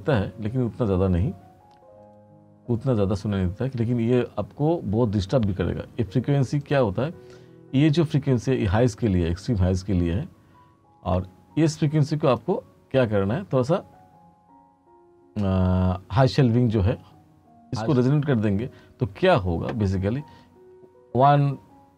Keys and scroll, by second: 18.3-20.6 typing.